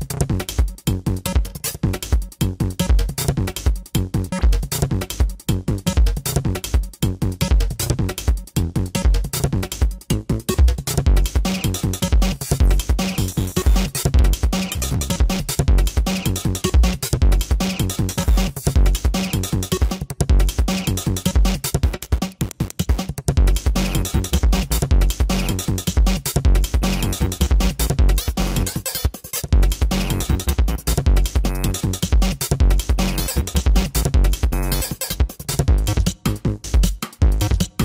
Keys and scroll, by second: 1.7 ], 8.4 space, 9.3 space, 18.7 space, 22.9 space, 24.1 space, 25.5 space, 26.5 space, 27.2 space, 28.3 space, 29.3 space, 30.3 space, 31.1 space, 32.4 space, 35.1 space, 35.5 ctrl+-, 36.1 ctrl+-.